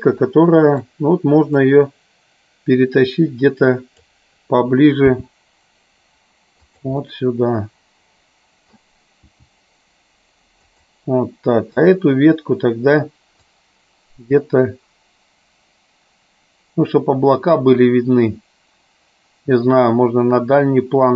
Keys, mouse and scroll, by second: 1.5-4.4 drag, 7.1-8.9 middle drag, 11.9 click, 13.4-21.1 drag.